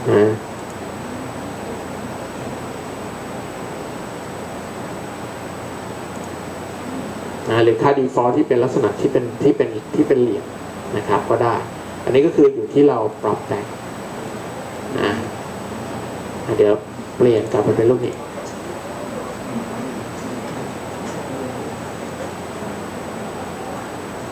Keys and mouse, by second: 4.1-11.0 middle drag.